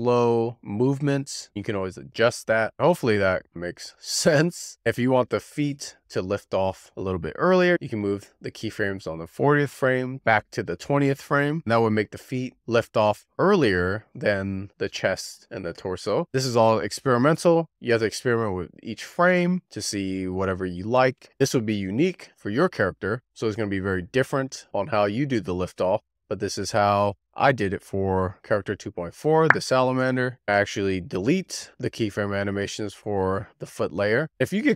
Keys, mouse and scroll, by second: 4.9-8.3 drag, 8.7 g, 13.3-17.7 drag, 22.7-24.2 drag, 24.2 g, 24.5 click, 24.7 click, 24.9 shift+d, 25.6 click, 26.5 click, 26.7 z, 26.9-27.3 scroll down 7, 27.6 click, 28.0 scroll up 10, 28.1 scroll down 6, 28.6 click, 29.3 scroll up 14, 30.4 BackSpace, 31.7 x, 34.1 click, 34.2-34.7 middle drag, 34.2-34.7 scroll up 1.